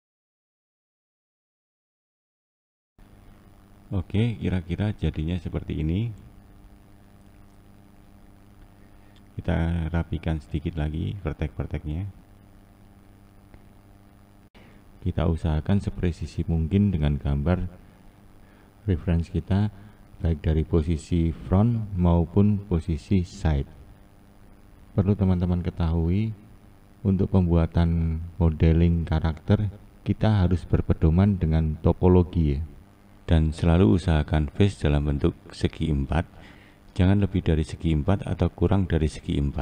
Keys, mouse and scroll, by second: 0.0 click, 0.1 scroll up 4, 0.2 click, 0.5 click, 0.6 click, 0.8 click, 0.9 click, 1.3 click, 1.6 click, 1.7 click, 2.0 click, 2.0 click, 2.3 scroll up 1, 2.5 click, 2.6 click, 3.0-3.9 scroll down 2, 3.9-4.2 scroll down 2, 6.8-7.5 shift+middle drag, 7.5-9.6 scroll up 2, 9.8-10.6 scroll down 2, 10.6-11.0 scroll up 1, 13.2 click, 13.8 click, 16.1 click, 16.7 click, 18.1 click, 18.7 click, 20.3 click, 20.8 click, 22.6 click, 23.6 click, 24.5 click, 25.6 click, 27.0 click, 27.5 click, 28.8 click, 29.3 click, 30.9 click, 31.4 click, 32.8 click, 33.4 click, 35.6 click, 36.6 click, 39.2 click.